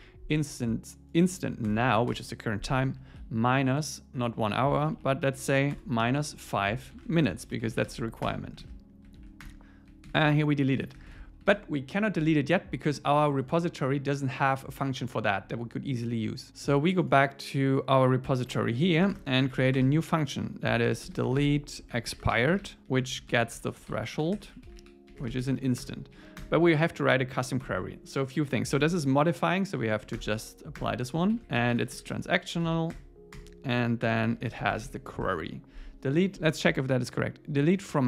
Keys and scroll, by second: 1.7 alt+Return, 3.0 Right, 6.3 super+Right, 6.6 Left, 8.3 Return, 8.7 super+s, 9.2 super+Right, 9.4 Return, 10.1 super+7, 11.6 super+s, 19.0 Return, 22.8 Left, 25.8 Return, 26.2 Up, 26.4 Return, 27.6 alt+l, 29.8 Left, 30.2 alt+Return, 30.8 Return, 31.4 super+Right, 32.9 Return, 34.0 alt+l, 35.3 Tab.